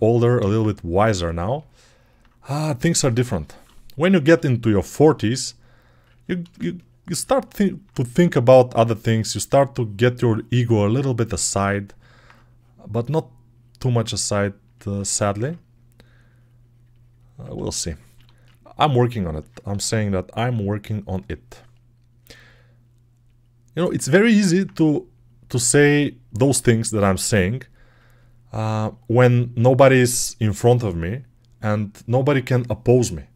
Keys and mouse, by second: 0.7 click, 1.4-4.3 alt+right drag, 4.3-6.4 alt+drag, 12.7-15.3 drag, 18.0 1, 19.6 g, 20.5-28.7 drag.